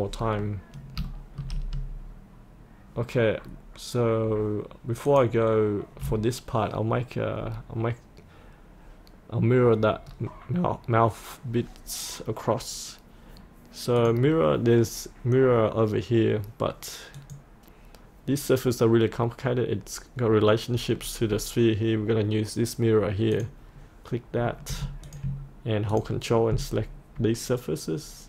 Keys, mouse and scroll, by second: 0.1-1.0 scroll up 1, 1.1 shift+middle click, 5.1 click, 10.2-14.0 scroll down 1, 14.0 click, 21.0-21.4 scroll up 1, 21.4-23.4 scroll down 1, 23.4 click, 25.1 click, 26.0 ctrl+click, 26.8-28.2 scroll up 1.